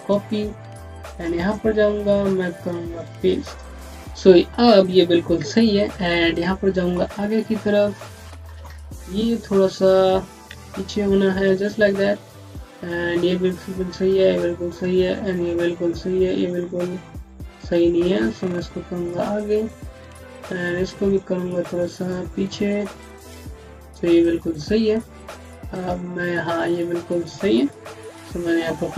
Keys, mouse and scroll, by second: 1.2 right click, 2.8 click, 6.1 typing, 9.2 click, 12.1 typing, 15.8-17.4 typing, 17.9 click, 19.2 typing, 21.0 click, 24.2 scroll down 1, 25.5-26.4 typing, 27.5-28.2 typing, 28.8 scroll down 1.